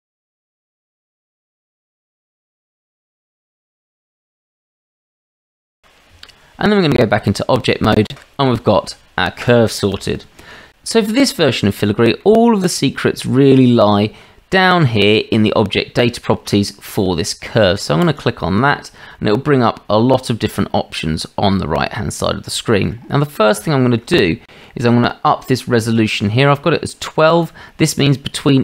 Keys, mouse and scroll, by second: 0.0-1.8 typing, 1.2 click, 1.7 click, 2.9 r, 3.1 s, 3.8 e, 4.2 r, 5.7 s, 6.1 Tab, 7.3 click, 11.8-12.2 shift+drag, 22.5-22.9 shift+drag, 23.7 shift+drag.